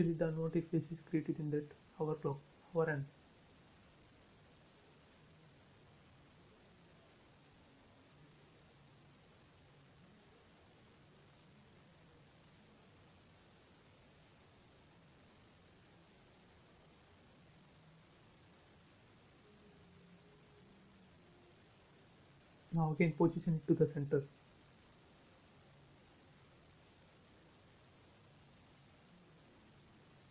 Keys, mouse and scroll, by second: 1.4 click, 2.1 space, 2.3 scroll up 1, 2.8 click, 4.5 shift+click, 5.3 Delete, 6.6 click, 7.3 Delete, 7.9 click, 8.6 Delete, 8.9 click, 9.0 space, 9.3 scroll down 1, 10.4-10.8 scroll down 1, 11.6 shift+middle click, 12.0-12.5 scroll up 1, 14.3 click, 14.7 scroll up 1, 15.8 e, 16.6 click, 19.3 space, 19.4 scroll down 1, 21.1 click, 21.3 space, 21.8 click, 22.3-22.8 scroll up 1, 23.7 m, 24.3 click, 25.8 scroll up 1, 27.6 click, 27.7 space, 28.0 middle click, 28.5 scroll down 1.